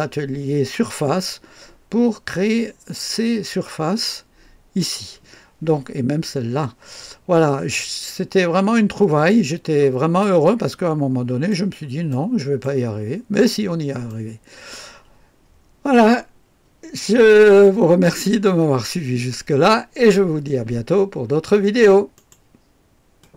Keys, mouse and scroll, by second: 7.4-7.8 scroll up 1, 7.8-8.2 scroll down 1, 8.6-10.2 middle drag, 10.2-11.5 right drag, 12.1 right click, 12.9-13.4 scroll up 1, 13.4-14.1 scroll down 1, 14.1 click, 22.2 right click, 23.2 click.